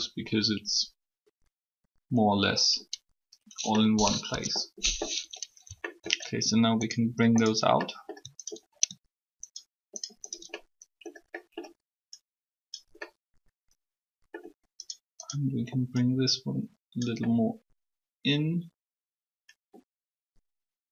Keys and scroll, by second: 4.2 3.